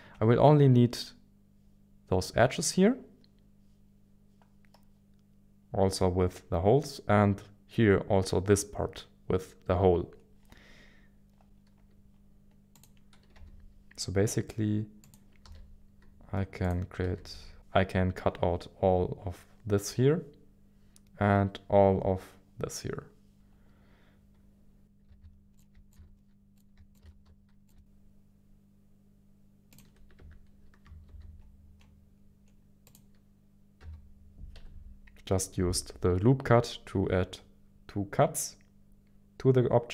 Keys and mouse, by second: 12.7 click, 13.3 g, 15.0 click, 15.4 s, 16.6 click, 17.0 s, 17.3 y, 25.0-27.2 typing, 25.5 click, 25.9 click, 26.5-27.0 drag, 27.6 click, 28.5 g, 29.7 click, 30.2 Tab, 31.1 ctrl+r, 33.8 g, 34.5 g, 36.8 z.